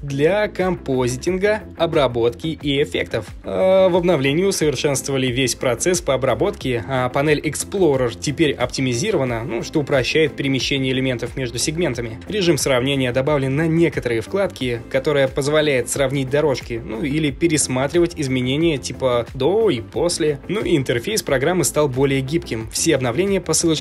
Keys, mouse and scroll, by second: 5.2 F15, 16.8 F15.